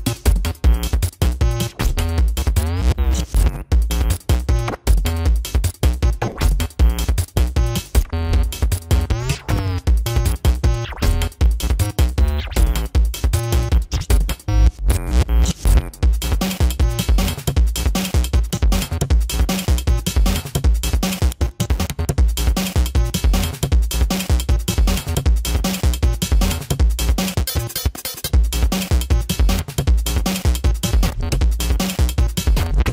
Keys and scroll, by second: 13.8 space, 14.4 space, 14.9 ctrl+-, 19.9 space, 22.9 space, 24.2 space, 25.0 ctrl+=, 26.6 space, 31.9 space.